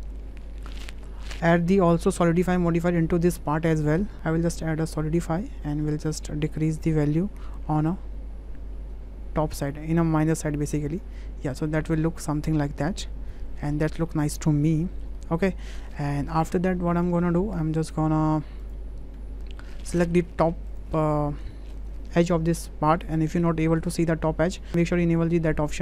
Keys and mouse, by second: 2.1-5.2 drag, 6.7-10.8 drag, 10.8-13.7 middle drag, 14.1-15.0 middle drag, 15.5 middle click, 16.1 shift+middle drag, 16.5 drag, 16.9 shift+click, 17.2 click, 17.8 click, 19.1 Tab, 19.9 click, 20.4 2, 20.7 click, 21.5 click, 23.2 click, 25.7 click.